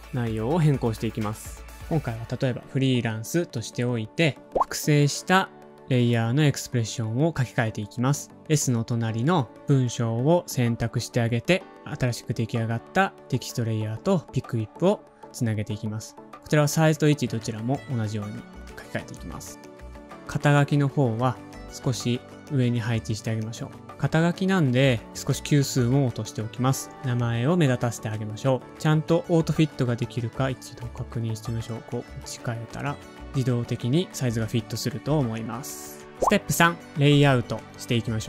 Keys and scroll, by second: 0.1 super+v, 1.9-3.1 typing, 5.4 shift+Left, 5.6 shift+Left, 19.2 v, 20.0 alt+super+Home, 20.0 super+z, 23.9 alt+shift+super+<, 25.5 alt+shift+super+<, 26.2 shift+super+<, 26.4 shift+super+<, 27.2 shift+super+>, 27.4 shift+super+<, 27.7 shift+super+>, 28.1 Return, 29.2 shift+super+a, 29.2 Left, 29.4-30.6 typing, 31.9-34.0 typing.